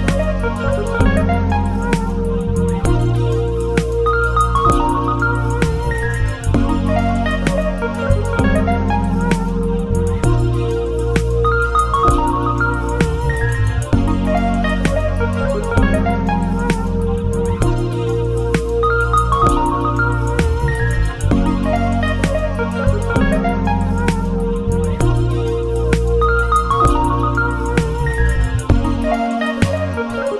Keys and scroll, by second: 17.7 ctrl+8.